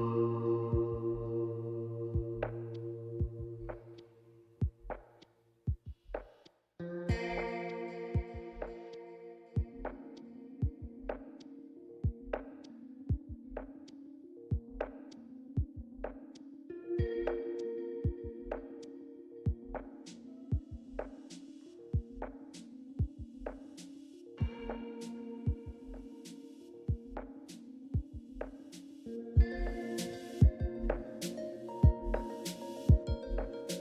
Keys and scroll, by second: 0.9 typing, 2.8-7.3 typing, 8.4 typing, 9.6 typing, 10.6 typing, 19.7 typing, 22.7-25.9 typing, 26.2 Return.